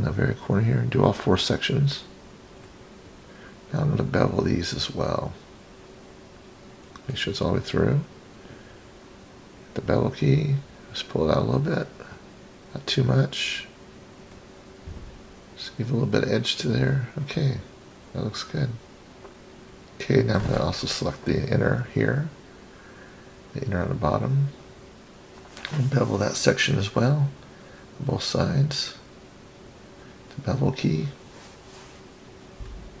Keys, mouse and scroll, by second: 0.8 shift+click, 1.1 shift+click, 1.5-2.2 scroll down 6, 3.5 click, 4.7-6.0 scroll up 4, 6.0 scroll down 1, 6.1-7.3 scroll down 7, 7.0-7.8 middle drag, 9.1 click, 10.4-13.9 drag, 15.3 click, 15.5 click, 16.8 click, 17.7-18.2 scroll down 2, 18.8-19.3 middle drag, 19.3 click, 20.4 click, 23.2 shift+click, 23.5 shift+click, 24.3 middle click, 26.0 shift+click, 26.2 shift+click, 27.3 shift+click, 27.5 shift+click, 27.9-28.6 scroll down 4, 28.6 middle click, 29.9 click, 30.7-31.1 scroll up 3, 31.1 middle click, 31.3 scroll down 1, 31.9-32.6 scroll down 3, 32.6 middle click.